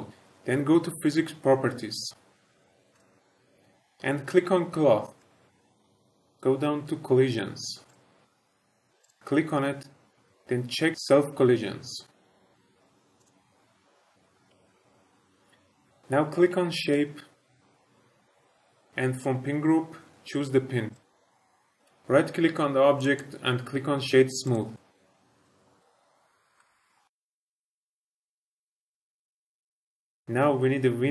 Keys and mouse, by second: 2.9 click, 5.1 click, 7.8 click, 9.0 click, 13.2 click, 16.7 click, 18.9-20.9 drag, 22.9 right click, 24.7 click, 25.1 click, 25.4 click, 26.4 middle click, 26.5 shift+middle drag, 27.1-29.2 typing, 27.3 middle drag, 27.7 shift+middle click, 27.7 middle click, 28.7 click, 28.8 middle click, 29.1 middle drag, 29.3 shift+middle click, 29.4 middle click, 29.7 click, 29.8 click.